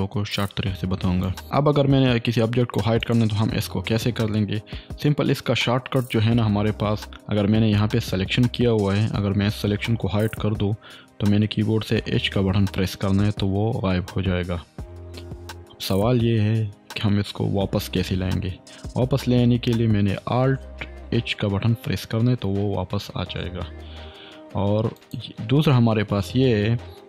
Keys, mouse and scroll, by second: 1.2 click, 3.0 click, 12.2 h, 20.1 h, 22.2 alt+h, 25.0 click.